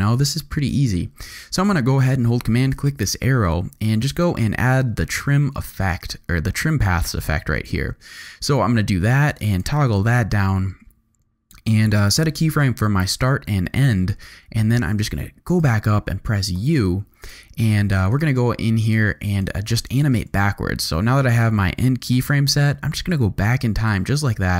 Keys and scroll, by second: 16.5 u, 17.9 z, 19.9 space, 20.3 v.